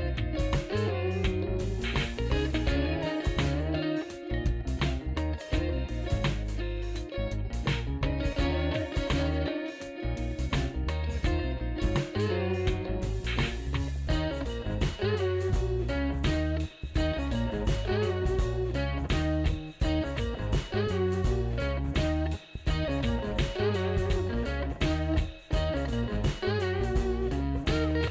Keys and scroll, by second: 2.1 Left, 2.3 Left, 2.5 space, 7.8-9.7 typing, 9.7 super+s, 11.2 super+s, 11.2 typing, 11.5 Up, 12.1 Return, 13.6 space, 19.9 ctrl+l, 20.9 w, 21.7 Tab, 24.6 Return, 26.9 space.